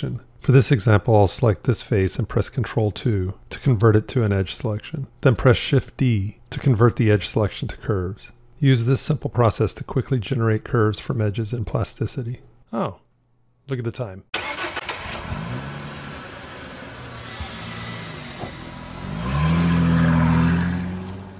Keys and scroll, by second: 2.3 ctrl+2, 5.3 shift+d.